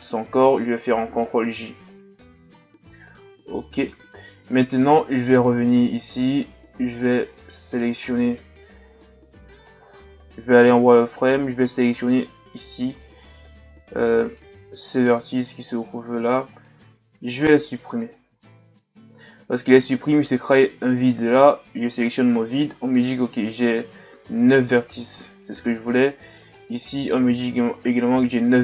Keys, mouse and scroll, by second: 1.4 ctrl+j, 2.6-4.0 middle drag, 4.0 scroll up 1, 4.4-4.9 middle drag, 4.9-5.4 scroll up 2, 5.4 Tab, 5.7 middle click, 6.5-7.0 scroll up 1, 7.1 right click, 7.4-8.4 middle drag, 8.4 KP_3, 9.8 z, 12.1 right click, 12.5 c, 17.4 x, 21.0 alt+right click, 26.5 alt+right click.